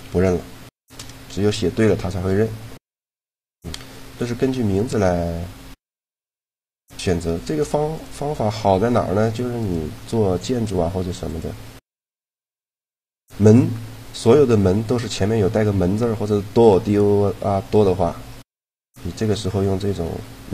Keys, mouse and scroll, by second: 3.2-4.9 drag, 3.5 right click, 4.4 a, 4.9 middle click, 5.4 middle click, 7.9 right click, 8.7 g, 10.5 g, 19.9 a.